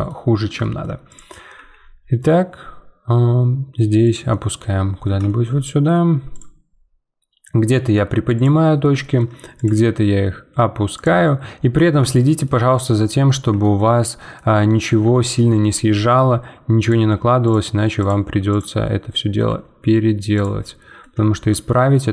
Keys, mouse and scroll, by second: 1.1 click, 1.5 g, 4.3-6.3 middle drag, 6.3 click, 6.8 g, 8.6 middle click, 9.5 click, 9.8 g, 11.3-16.8 middle drag, 16.8-19.1 drag, 19.1 middle click, 19.5 g, 20.6-22.1 middle drag.